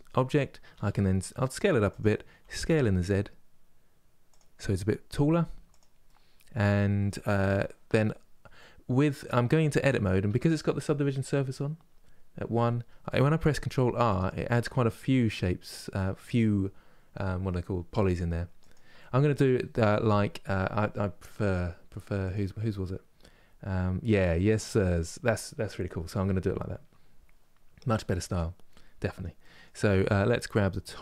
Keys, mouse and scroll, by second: 0.4 s, 2.1 s, 4.8 g, 5.7-7.5 middle drag, 7.5 Tab, 8.2 middle click, 9.1 Tab, 9.5 middle click, 9.9 Tab, 13.3 ctrl+r, 18.6-28.0 middle drag, 28.0 click, 28.6-31.0 middle drag.